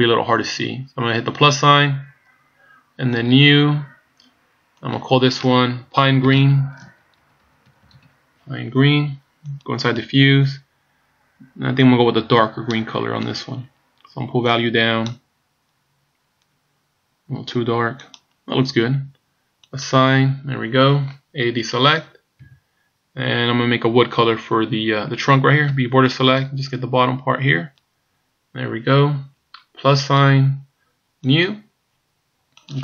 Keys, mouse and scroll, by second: 1.3 click, 3.3 click, 4.9 click, 7.9 e, 9.9 click, 19.7 click, 22.5 a, 25.7 b, 30.0 click, 31.2 click, 32.6 click.